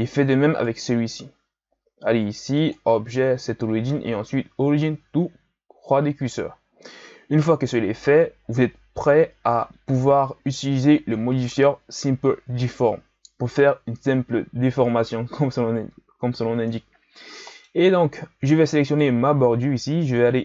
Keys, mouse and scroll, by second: 0.6 right click, 2.5-5.7 drag, 16.3-16.9 scroll down 1, 16.9-17.3 scroll down 2, 17.3-17.8 middle drag, 17.8-18.9 scroll up 2, 18.9 right click.